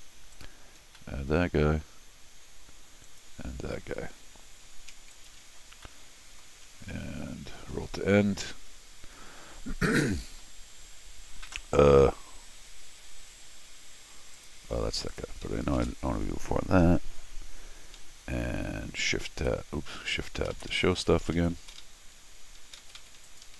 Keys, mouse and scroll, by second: 0.3 click, 0.8 scroll down 1, 0.9 middle click, 3.0 click, 5.1 click, 5.8-6.4 scroll down 2, 7.6 ctrl+alt+shift+r, 9.2 ctrl+middle click, 9.6 ctrl+middle click, 10.0 ctrl+middle click, 14.3 ctrl+click, 15.1 ctrl+click, 19.3 shift+Tab, 20.0 shift+Tab, 20.2 shift+Tab, 20.5 shift+Tab, 20.7 shift+Tab, 20.8 shift+Tab, 21.2 shift+Tab, 21.3 shift+Tab, 21.5 shift+Tab, 22.6 shift+Tab, 23.0 shift+Tab, 23.2 click.